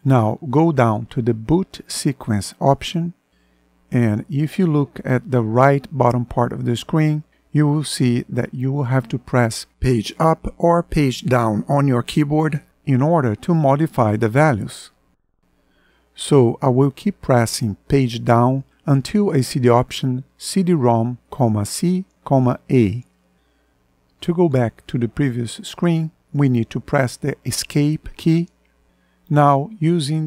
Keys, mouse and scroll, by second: 1.4 Down, 15.9 Page_Down, 26.3 Escape, 29.2 Right.